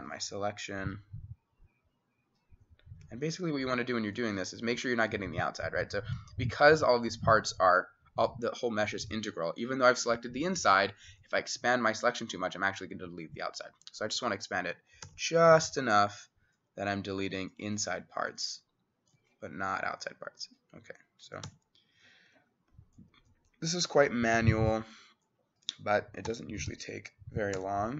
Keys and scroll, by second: 3.4-4.1 typing, 15.1 x, 21.5 x, 26.3-27.9 typing.